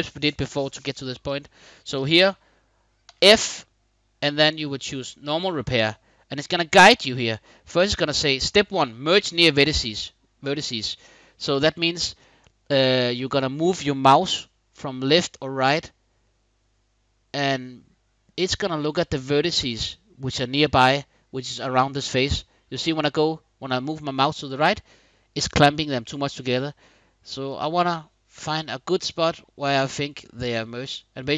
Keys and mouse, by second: 2.8 f.